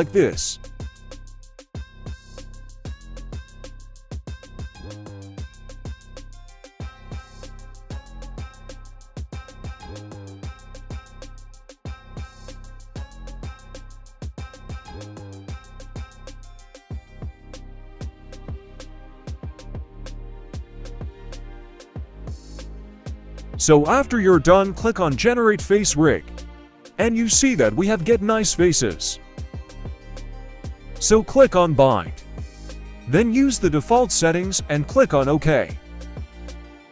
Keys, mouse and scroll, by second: 0.8 shift+middle click, 1.2-1.6 scroll up 2, 1.6 right click, 2.3 g, 3.2 right click, 3.4 g, 5.5-10.0 middle drag, 10.3-10.8 scroll up 1, 10.8 right click, 11.1 middle click, 12.3 right click, 12.6 middle click, 12.9 g, 14.1 middle click, 14.7 scroll up 1, 14.9 middle click, 15.3 g, 16.9 scroll down 1, 17.1 middle click, 18.3-18.9 scroll down 1, 18.9 KP_3, 20.1 right click, 20.3 g, 21.1 right click, 21.2 g, 24.0 click, 25.7-26.7 scroll down 2, 26.0-27.5 middle drag, 27.9 middle drag, 28.7 scroll down 1, 28.9-29.3 middle drag, 29.5 middle click, 30.6-36.9 drag.